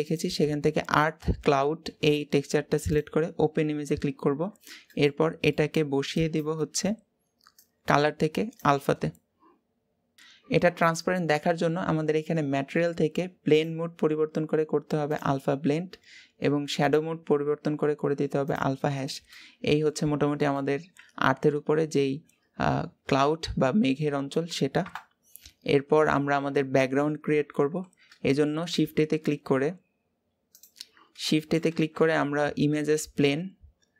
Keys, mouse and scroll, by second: 4.9-5.3 scroll up 1, 8.4-10.2 drag, 15.0-16.4 drag, 16.6-19.1 drag, 19.1 middle click, 19.8 scroll up 2, 20.3-24.6 middle drag, 24.6 KP_0, 25.5-26.2 scroll down 3, 26.2-26.9 scroll up 2, 26.9-27.9 scroll up 1, 27.9 scroll down 1, 28.0-29.0 middle drag, 29.0-30.4 scroll up 2, 30.4 click, 30.9 scroll down 1, 31.1-33.9 middle drag.